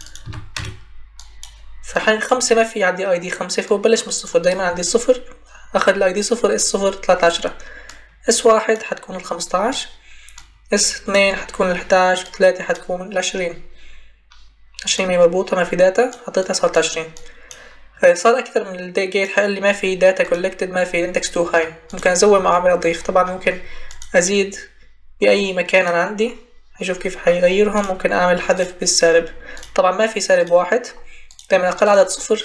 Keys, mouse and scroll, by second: 0.2 5, 0.5 Return, 21.6-22.3 scroll up 1, 22.3-23.5 scroll up 1, 25.7-26.1 scroll up 1, 26.2-26.8 scroll down 1, 26.8-27.2 scroll down 1, 27.7-28.5 scroll up 1, 28.5 scroll up 1.